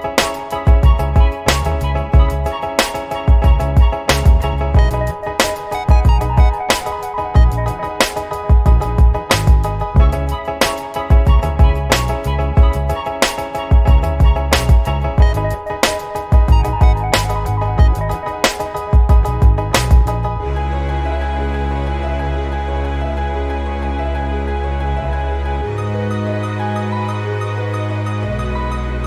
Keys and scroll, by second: 6.3 b, 16.5-17.7 ], 18.3 ], 18.4 ], 19.6-23.4 typing, 24.4 ].